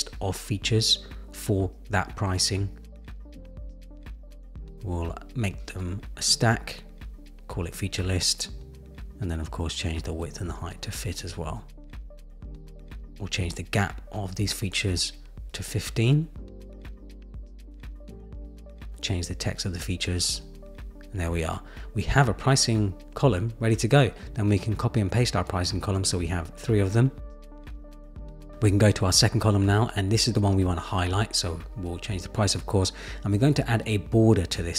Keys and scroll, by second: 7.0 Return, 15.1 Up, 16.6 Up, 19.6 super+a, 20.3 super+v, 20.5 super+v, 24.8 super+c, 25.0 super+v.